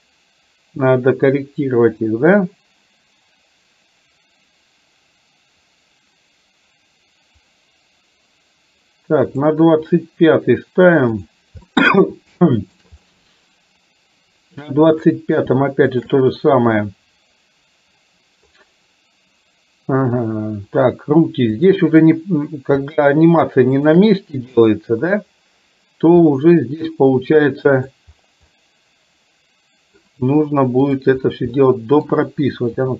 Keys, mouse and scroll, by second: 0.1-9.6 drag, 11.6-12.7 shift+middle drag, 14.9 click, 16.0 shift+click, 21.6 click, 23.9 shift+click, 26.4-27.9 middle drag, 28.6-30.1 middle drag, 30.9 click, 31.7 middle click, 32.7 g.